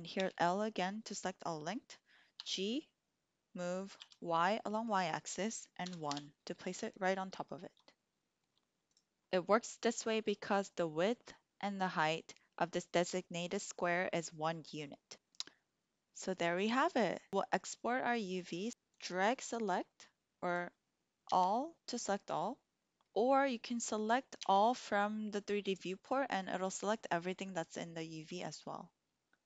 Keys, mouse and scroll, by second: 0.1 l, 2.3 g, 2.5 g, 3.9 y, 5.8 KP_1, 6.0 Return, 8.7 click, 17.4-18.7 drag, 18.8 click, 20.5 click, 21.2 a, 24.2 a.